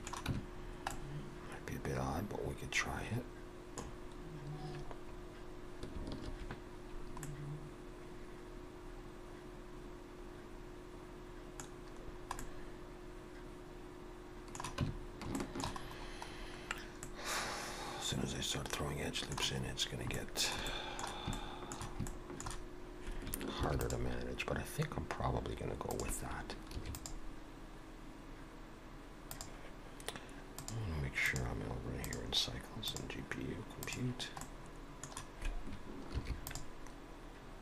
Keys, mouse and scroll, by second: 0.3 Tab, 0.7 scroll down 1, 0.9 middle click, 3.9-5.3 scroll down 1, 5.9-6.2 scroll down 2, 6.2 ctrl+2, 7.2 middle click, 11.7 scroll down 2, 12.4 middle click, 12.4-14.1 scroll down 1, 14.8 Tab, 15.4 shift+middle click, 15.9-16.9 scroll up 4, 17.0 middle click, 19.6 scroll up 1, 20.2 shift+middle click, 20.7 middle click, 21.3 shift+middle click, 22.1 shift+middle click, 23.6 ctrl+r, 30.6 click, 31.2 click, 32.8 click, 34.4 middle click, 36.4 ctrl+r.